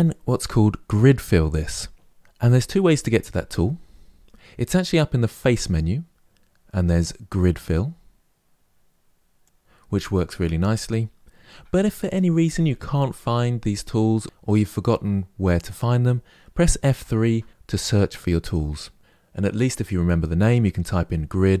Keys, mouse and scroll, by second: 5.3-8.2 drag, 16.6 F3.